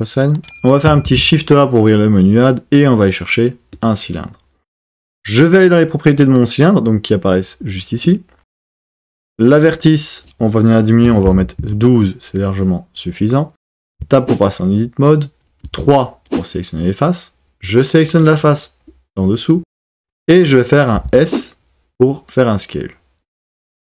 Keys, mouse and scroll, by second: 1.0 shift+a, 8.0 click, 9.6-11.7 drag, 13.9 Tab, 15.6 3, 18.2 click, 21.0 s.